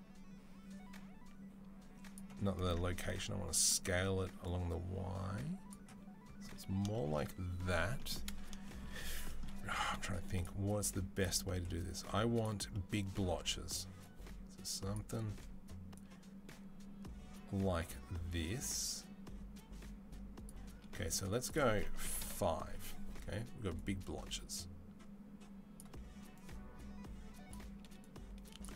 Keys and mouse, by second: 8.6 middle click.